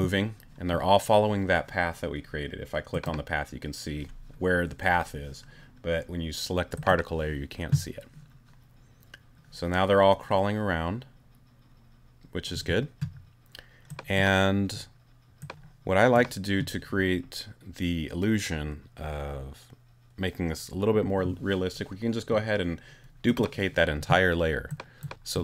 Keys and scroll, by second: 12.5 space.